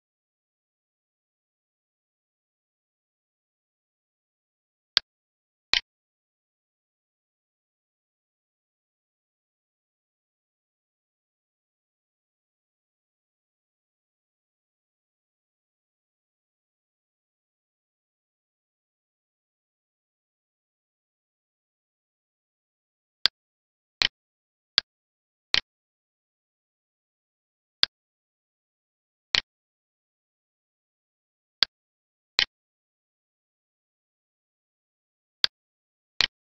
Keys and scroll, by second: 2.6 alt+e, 6.9 Left, 12.3 Up, 12.7 Left, 14.8 Up, 15.0 Left, 17.5 ctrl+s, 20.9 alt+e.